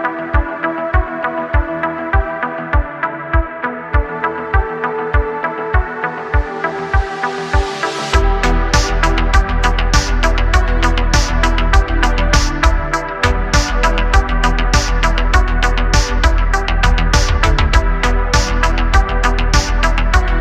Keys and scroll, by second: 0.1 s, 1.6 y, 5.8 q, 7.3 q, 11.9 `, 12.8 s, 16.9 shift+a, 18.6 alt+z.